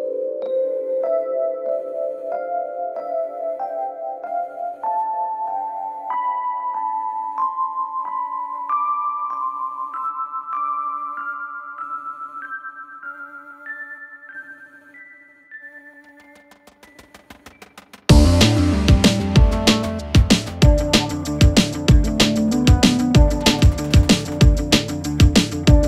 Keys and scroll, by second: 3.6-6.4 typing, 5.5 Delete, 8.2 /, 25.7 p.